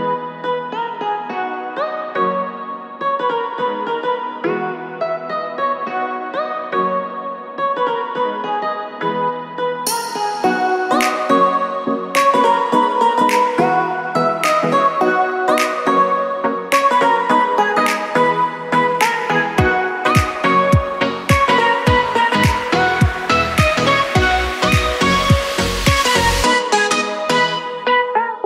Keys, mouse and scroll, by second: 0.3-0.9 scroll down 3, 0.9-1.7 scroll up 3, 2.7 click, 3.1 click, 4.5 click, 4.9 click, 5.8 s, 8.7 e, 14.0 s, 17.3 ctrl+r, 19.9 s, 22.1 alt+click, 22.8 e, 25.3 s.